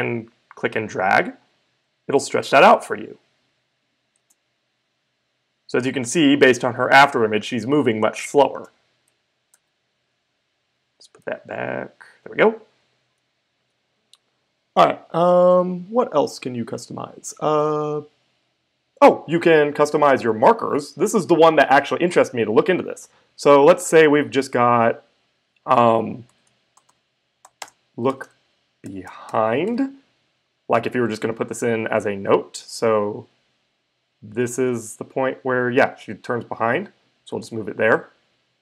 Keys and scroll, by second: 4.2 space, 8.5 space, 9.5 super+z, 11.2 super+z, 26.2-30.1 typing.